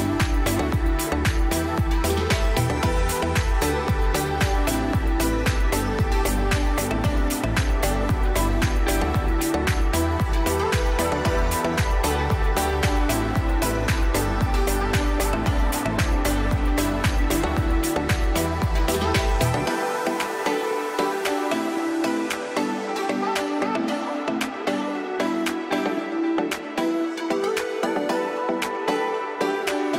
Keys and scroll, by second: 0.1 F2, 2.8 space, 10.3 F4, 11.6 c, 12.0 shift+F2, 12.9 alt+c, 14.3 F3, 14.7 Escape, 18.9 Escape, 21.5 alt+c, 25.9 Escape, 27.0 Delete.